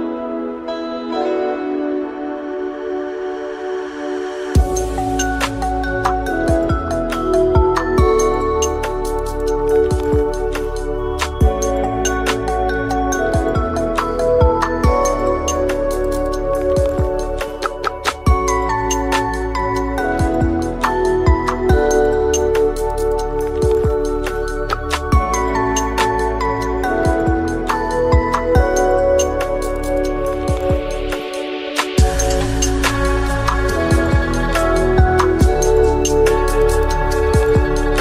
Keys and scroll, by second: 8.8 Tab, 16.0 ctrl+z, 21.4 Tab, 22.0-22.4 typing, 22.4 Return, 25.4 F2, 27.3 Tab, 34.8 F2.